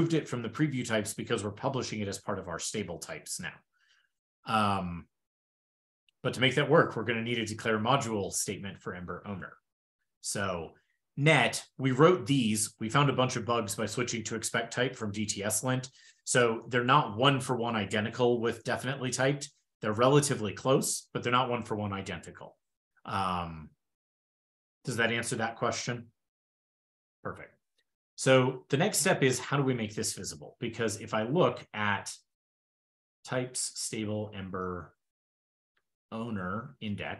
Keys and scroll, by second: 32.0 ctrl+super+Return, 36.5 ctrl+e.